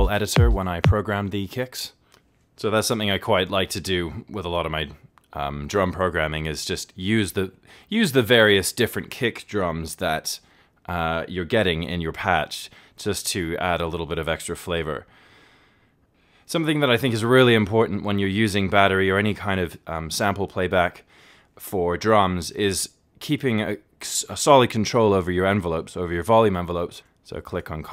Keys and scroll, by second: 3.8 alt+s.